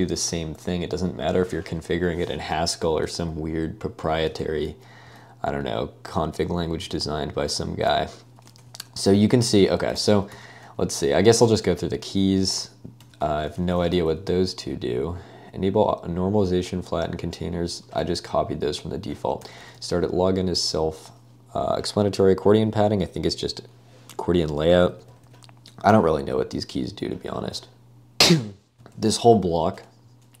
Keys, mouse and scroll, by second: 4.4 ctrl+d, 5.1 ctrl+d, 6.8 ctrl+u, 9.3 ctrl+u, 9.5 ctrl+u, 10.0 j, 10.3 k, 11.0 shift+v, 11.4 Escape, 12.2-14.5 typing, 17.8 Escape, 18.0 k, 18.2 k, 19.4 j, 24.9 j, 25.9 j, 28.6-29.6 typing, 29.8 Escape.